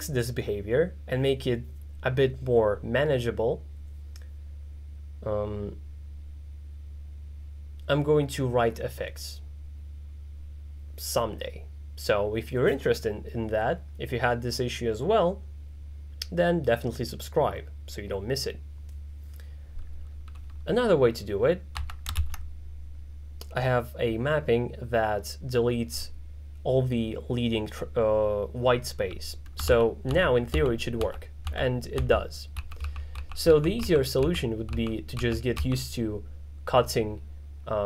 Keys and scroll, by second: 21.8 =, 22.2 shift+,, 29.8 shift+], 32.6 shift+[, 35.2 shift+[.